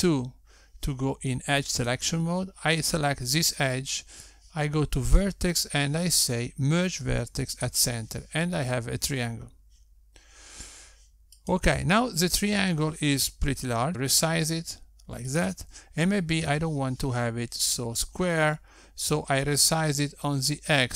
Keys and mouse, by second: 0.5 2, 2.4 click, 5.9 click, 11.9 click, 13.9 Tab, 14.1 s, 19.6 s.